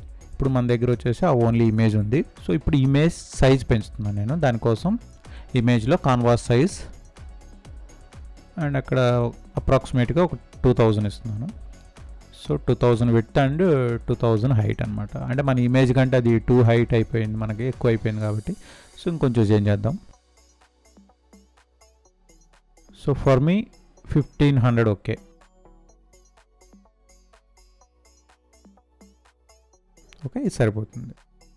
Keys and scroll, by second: 16.0 ctrl+0.